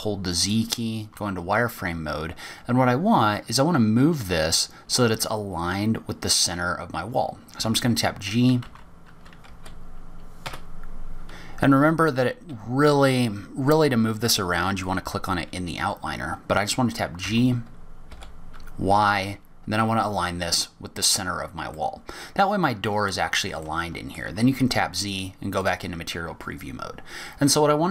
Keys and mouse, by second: 0.7 z, 8.4 g, 15.5 click, 18.0 g, 22.6-24.2 middle drag, 24.5-24.9 shift+middle drag, 25.1 z.